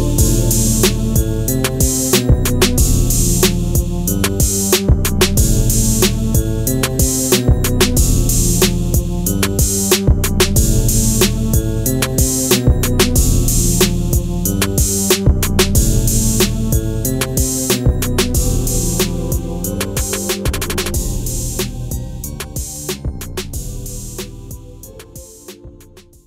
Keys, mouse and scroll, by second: 0.1-0.8 shift+click, 1.1-1.8 scroll down 1, 1.8 click, 2.6 alt+scroll up 1, 3.0 click, 4.0 ctrl+a, 4.7 alt+Right, 5.8 alt+Left, 7.2 click, 7.9-9.1 scroll down 1, 9.1 click, 9.5 click, 9.8-10.4 alt+scroll down 2, 10.5-10.9 alt+scroll down 1, 10.9 click, 11.5 click, 12.0 alt+scroll up 1, 12.4-13.1 shift+click, 13.3 alt+scroll down 1, 16.2 ctrl+g, 17.2 click.